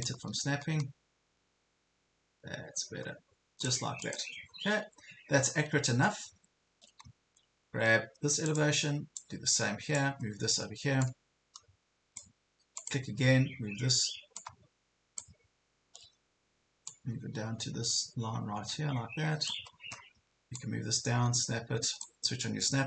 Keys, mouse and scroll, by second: 4.1 click, 4.5 ctrl+scroll down 1, 5.5 ctrl+scroll down 1, 6.6 ctrl+scroll up 1, 7.0 ctrl+scroll down 1, 8.5 click, 10.2 ctrl+scroll up 1, 11.2-12.4 drag, 15.4 ctrl+scroll up 1, 17.0-19.6 drag, 19.7 ctrl+scroll down 1, 20.7-22.8 drag.